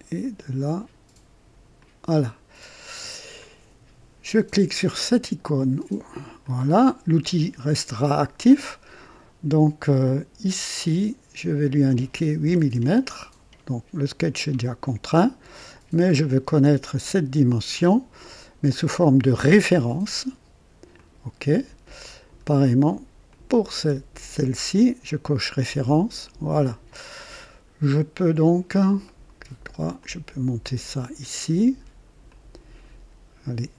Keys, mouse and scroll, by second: 1.8 click, 2.6 right click, 6.4 click, 10.5 click, 12.4 KP_8, 12.7 Return, 16.1 click, 19.7 click, 21.0 click, 22.1-22.4 scroll up 2, 23.3 click, 25.2 click, 26.3 click, 27.1 scroll down 1, 27.4 right click, 29.0 right click, 30.0-31.2 drag, 32.3-33.0 drag.